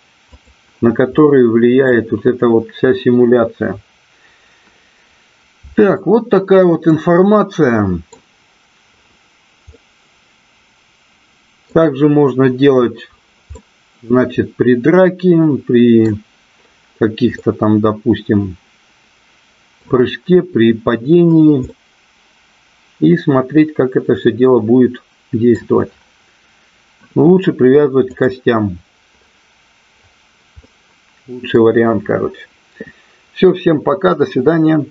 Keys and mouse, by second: 1.1 middle click, 5.9-6.8 middle drag, 7.2-8.0 middle drag, 9.8-11.7 middle drag, 13.5-16.2 middle drag, 17.4-19.8 middle drag, 21.7-25.4 middle drag, 28.2 click, 30.6-31.5 middle drag.